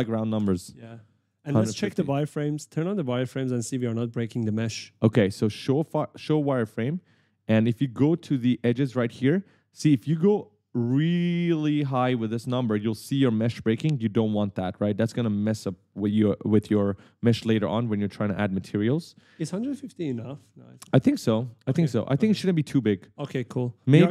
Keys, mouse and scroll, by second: 1.4 click, 2.4 right click, 2.4-3.7 typing, 6.0 click, 6.7 right click, 8.0 scroll down 1, 8.7 w, 10.4 click, 12.3 right click, 12.4 d, 14.3 click, 14.9 click, 17.0 click, 17.5 right click, 18.2-22.0 typing, 21.6 scroll up 1.